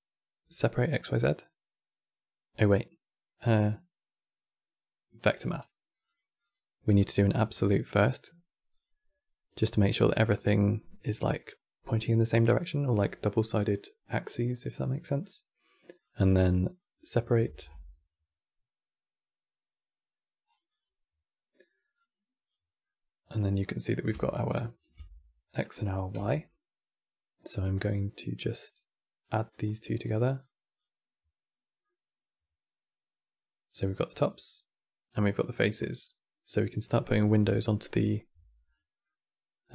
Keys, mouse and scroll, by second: 6.7-9.3 drag, 9.3-12.3 middle drag, 15.7-16.7 drag, 16.7-17.2 middle drag, 17.2 shift+a, 21.7 click, 22.5-24.2 middle drag, 24.2 ctrl+shift+click, 25.3-25.9 middle drag, 25.9 q, 29.2-30.2 drag, 31.5-34.6 middle drag, 38.4-39.7 middle drag.